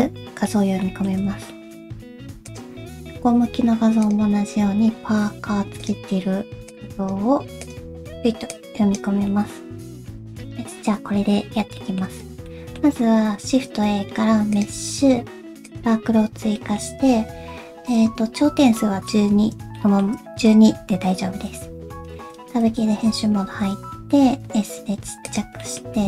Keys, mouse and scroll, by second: 0.8 middle click, 1.5 shift+middle click, 2.5 click, 4.0 click, 9.3 middle click, 10.1 shift+middle click, 11.7 middle click, 12.4 shift+middle click, 13.4 shift+a, 16.1 scroll down 1, 16.5 middle click, 18.7 middle click, 19.7 shift+middle click, 22.0 Tab, 23.4 s, 25.6 middle click, 25.9 g.